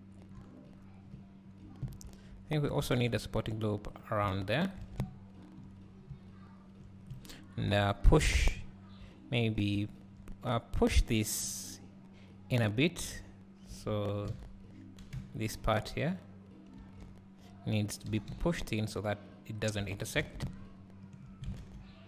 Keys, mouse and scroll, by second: 0.7 scroll up 1, 1.2 `, 2.1 Tab, 2.9 ctrl+r, 4.4 Tab, 4.6 scroll down 1, 5.0 `, 5.9 scroll up 1, 6.1 `, 7.2 click, 7.8 Tab, 9.9 `, 14.3 alt+a, 16.2 b, 18.1 g, 19.9 Tab, 20.2 alt+a, 20.5 `.